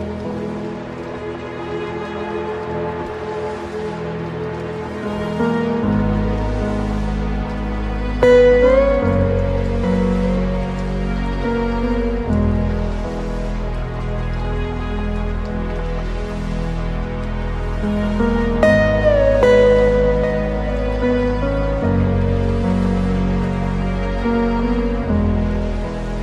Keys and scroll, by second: 5.9 ctrl+space, 8.4 ctrl+i, 10.3 ctrl+alt+space.